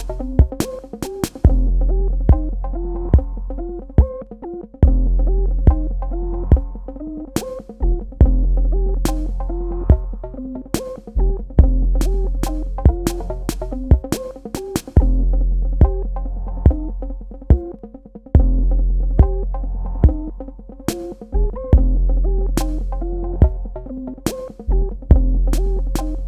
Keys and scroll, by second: 5.8 space, 24.3 space.